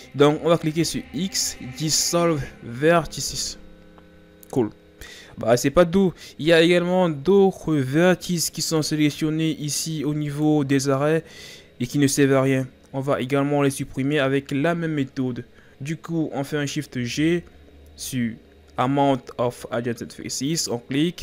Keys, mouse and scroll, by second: 0.7 x, 6.5-7.4 scroll up 4, 7.4-8.8 ctrl+scroll down 2, 8.8 right click, 10.3 right click, 15.7-16.9 scroll down 6, 16.9 shift+g.